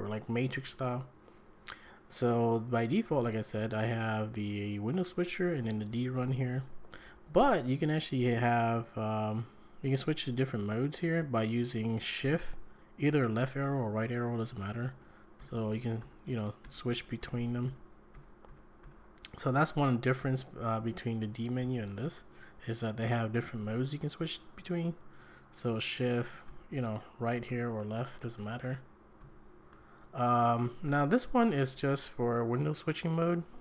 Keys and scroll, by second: 3.6 Down, 4.0 Up, 5.4 Down, 5.6 Down, 6.0 Down, 6.2 Down, 6.3 Down, 6.6 Down, 6.9 Up, 7.1 Up, 15.4 shift+Right, 16.0 shift+Right, 16.6 shift+Right, 17.2 shift+Right, 17.7 shift+Right, 18.1 shift+Right, 18.5 shift+Right, 18.8 shift+Right, 20.1 shift+Right, 21.6 shift+Left, 26.5 shift+Right, 28.5 shift+Left, 29.2 shift+Right.